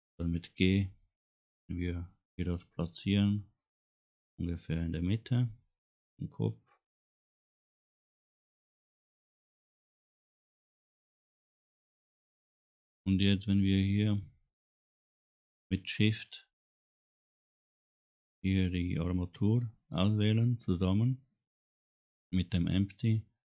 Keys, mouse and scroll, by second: 1.2 g, 10.5 middle click, 11.5 scroll up 1, 11.9 middle click, 17.6 shift+click.